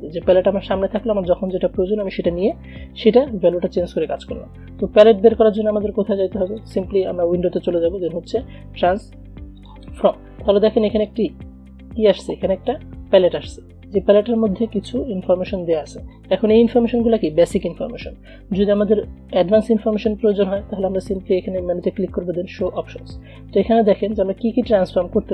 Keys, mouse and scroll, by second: 6.6 click, 9.7-25.3 drag.